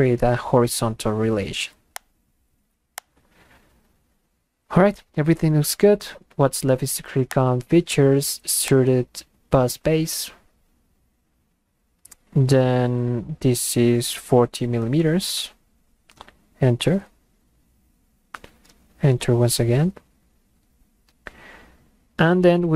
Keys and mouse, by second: 2.0 click, 3.0 click, 7.3 click, 8.7 click, 16.5 Return, 19.0 Return.